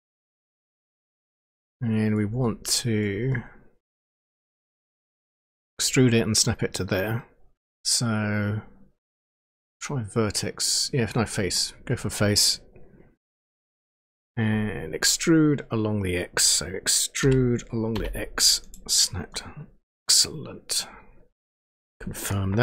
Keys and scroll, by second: 17.2 e, 17.9 x.